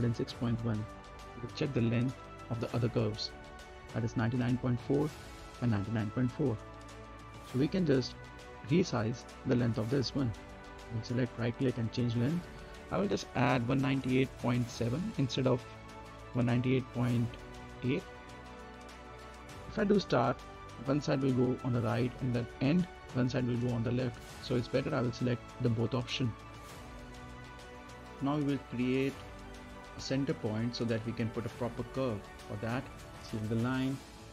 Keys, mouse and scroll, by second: 2.1-2.5 scroll up 1, 2.5 middle click, 3.6 click, 7.5 middle click, 8.1-8.4 scroll down 1, 8.4 middle click, 9.2 click, 9.7 right click, 11.6 click, 13.8-14.6 typing, 16.7-17.5 typing, 17.8-28.2 drag, 28.2-28.5 scroll up 1, 28.5 middle click, 28.8-29.1 scroll down 1, 29.1 middle click, 29.8 scroll down 1, 30.1 middle click, 31.4 click, 32.4 right click.